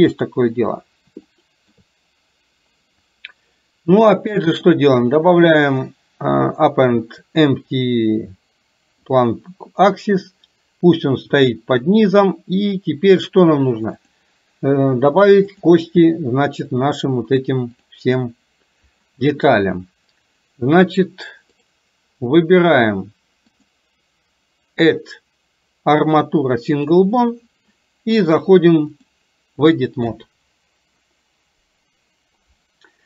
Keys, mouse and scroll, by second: 0.1 click, 1.4 shift+middle click, 4.7-9.3 drag, 14.1 click, 15.6 drag, 16.8 click, 17.9 click, 23.5-27.0 drag, 29.1 click.